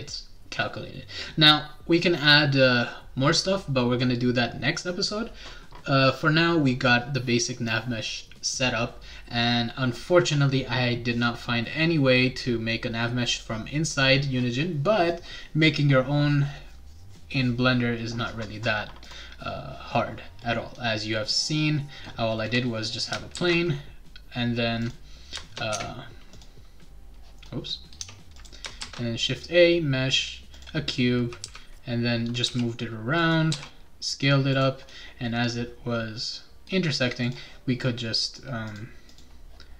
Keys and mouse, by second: 19.0 click, 23.3 shift+a, 24.8 click, 25.7 `, 25.7 Tab, 26.3 click, 28.0 Tab, 28.4 click, 28.8 shift+a, 30.5 click, 31.4 g, 32.4 x, 33.2 click, 33.5 s, 34.5 click, 37.2 click, 38.7 click, 39.1 click.